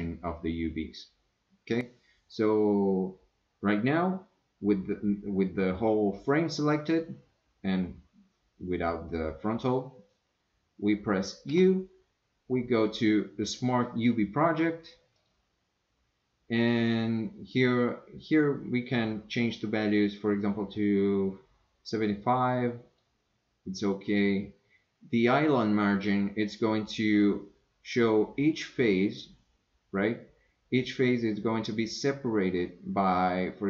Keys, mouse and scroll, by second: 11.5 u.